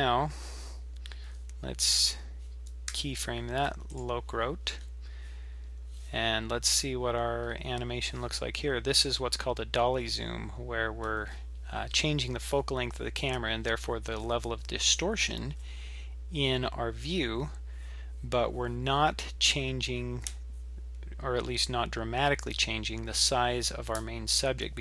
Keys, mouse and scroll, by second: 1.9-2.9 scroll down 7, 2.9 i, 4.7-5.7 scroll up 8, 5.7-6.6 scroll up 1, 6.6-6.9 scroll down 3, 7.4-8.2 scroll up 3.